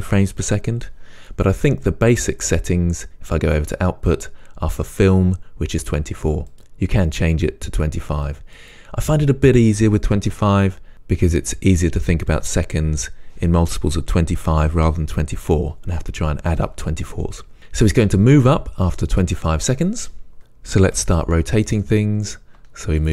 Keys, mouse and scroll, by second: 3.6-17.6 drag, 20.4 click, 20.7-23.1 typing, 21.0 click, 21.8 click.